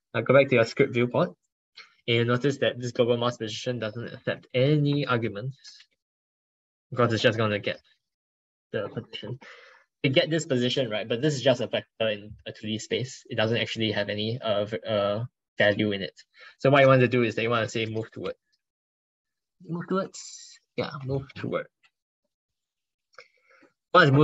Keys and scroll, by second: 3.3 ctrl+Left, 3.7 ctrl+Right, 7.6 ctrl+Left, 7.8 ctrl+Left, 8.0 ctrl+Left, 8.4 ctrl+Right, 12.9 ctrl+Left.